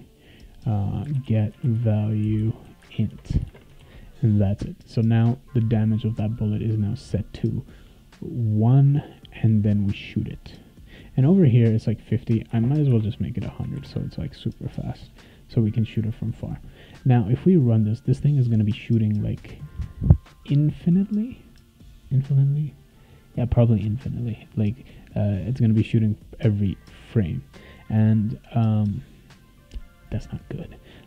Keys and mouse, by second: 0.8-4.0 typing, 10.9 click, 11.4 click, 12.5 1, 12.9 0, 13.7 ctrl+s, 26.8 click, 27.0 click.